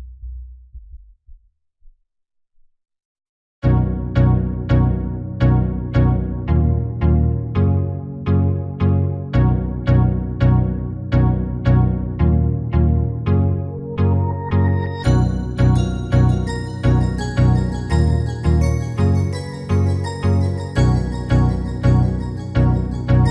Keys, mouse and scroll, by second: 1.1-4.1 middle drag, 4.1-6.0 drag, 5.2 shift+a, 9.0 r, 13.5 r, 16.9 s, 19.2-21.2 middle drag, 19.2-20.3 scroll up 1, 20.3-21.2 scroll up 1, 20.3 s.